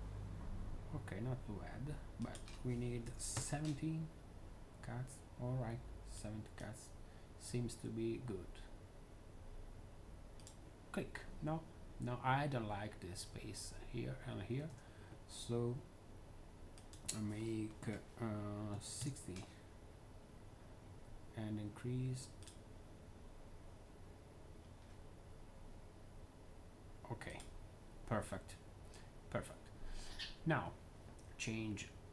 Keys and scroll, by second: 2.7-3.5 typing, 14.6 z, 18.4-19.3 typing.